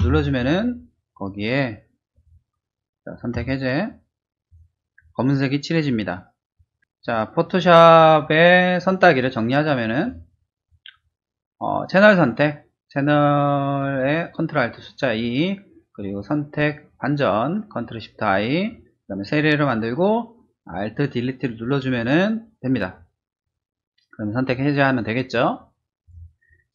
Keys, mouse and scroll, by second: 0.0 alt+Delete, 3.3 ctrl+d, 4.4 click, 10.0 click, 26.0 click.